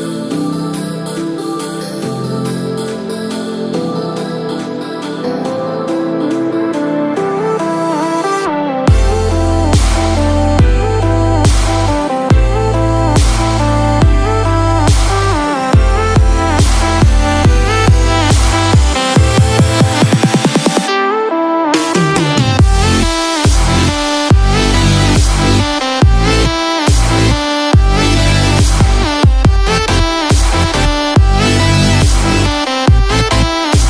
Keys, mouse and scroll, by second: 0.5-1.4 scroll down 14, 2.7 shift+click, 2.7 scroll down 1, 3.0-3.5 scroll up 5, 4.2-5.3 scroll up 5, 5.5-6.4 scroll up 8, 7.4 alt+z, 8.0-8.3 scroll down 2, 11.6 scroll down 12, 12.4 scroll down 1, 18.4 u, 28.0 right click, 29.0 Tab, 29.3-30.7 scroll down 11, 30.4-32.1 scroll up 3, 30.7 middle click, 32.1 click.